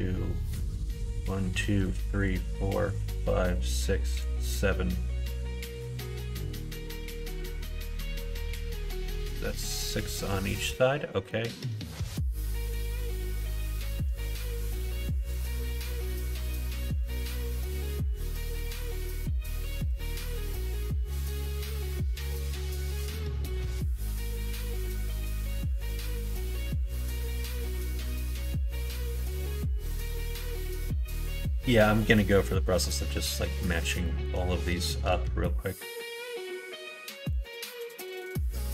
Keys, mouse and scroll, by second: 0.2 click, 0.8 click, 1.1 click, 1.8 click, 3.4 click, 4.1 click, 6.0 middle click, 7.0 middle click, 9.1 middle click, 9.5 middle click, 10.3 click, 11.2 middle click, 13.5 shift+click, 15.1 middle click, 15.9 middle click, 16.8 2, 17.4 middle click, 18.7-19.9 middle drag, 21.5 ctrl+r, 25.3 middle click, 26.0 ctrl+z, 27.0 ctrl+r, 29.1 g, 30.9 middle click, 31.4 middle click, 31.7 middle click, 32.2 middle click, 32.6 middle click, 33.1 middle click, 33.4 middle click, 34.0-34.6 scroll up 2, 34.1 middle click, 34.6 shift+middle click, 36.2 click, 36.9 1, 38.6-38.7 middle drag.